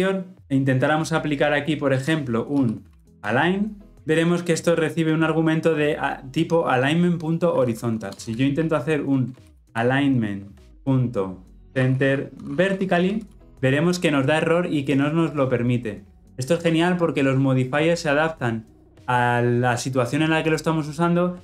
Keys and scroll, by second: 13.4 Return.